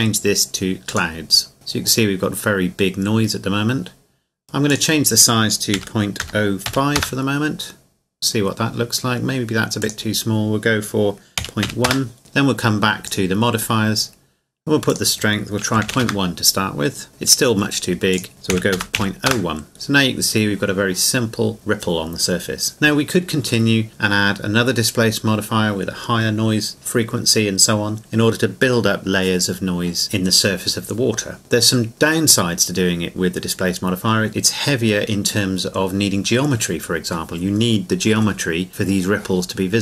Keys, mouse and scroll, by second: 4.7 click, 5.7 KP_Decimal, 6.2 KP_0, 6.7 KP_5, 6.9 KP_Enter, 9.8 click, 11.4 KP_Decimal, 11.7 KP_1, 11.9 KP_Enter, 13.1 click, 15.8 KP_Decimal, 16.0 KP_Enter, 18.1 click, 18.5 KP_Decimal, 18.7 KP_0, 18.9 KP_1, 19.3 KP_Enter.